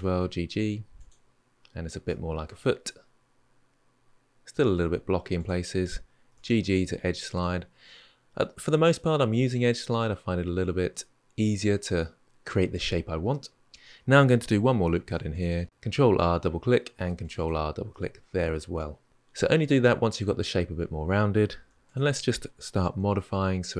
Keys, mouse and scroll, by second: 1.2-1.8 scroll down 2, 1.8-4.9 middle drag, 5.1 click, 6.1 g, 7.6-10.7 middle drag, 13.7-14.7 middle drag, 14.7 ctrl+r, 16.7 ctrl+r, 17.7-19.1 middle drag, 21.4 1, 21.6 click, 22.7 g.